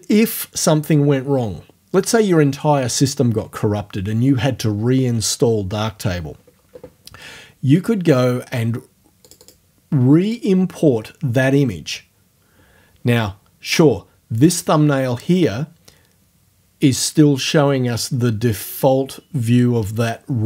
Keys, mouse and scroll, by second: 7.8 click, 9.2 click, 10.3 click.